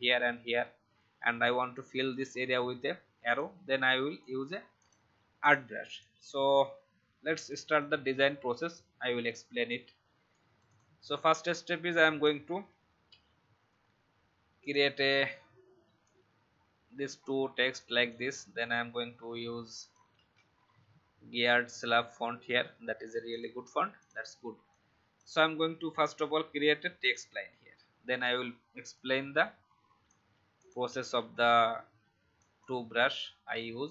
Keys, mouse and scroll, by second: 8.7 Delete, 9.2 click, 12.7 ctrl+x, 13.0 BackSpace, 14.6 click, 15.0 ctrl+v, 16.0-19.1 drag, 20.0-20.8 typing, 21.6 click, 28.9 alt+shift+click, 31.3-32.4 alt+scroll up 1, 32.4 click.